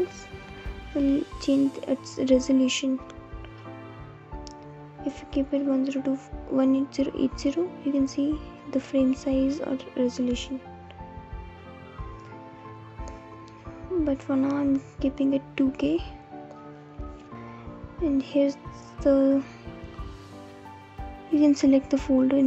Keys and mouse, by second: 2.6-5.1 drag, 6.1-7.5 drag, 8.9-14.9 drag, 22.3 click.